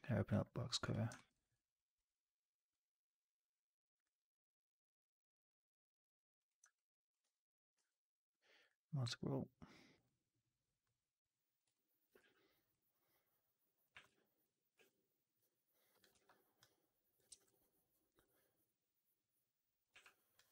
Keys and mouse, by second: 0.7 click, 1.0 alt+middle drag, 1.2 alt+right drag, 1.4-1.8 alt+drag, 6.4 drag, 6.6-7.0 alt+drag, 7.1 w, 7.6 q, 11.5 click, 11.6 alt+click, 13.8 w, 14.2 alt+click, 14.6 r, 16.0 ctrl+z, 17.2 ctrl+z, 19.8 w, 20.2 click.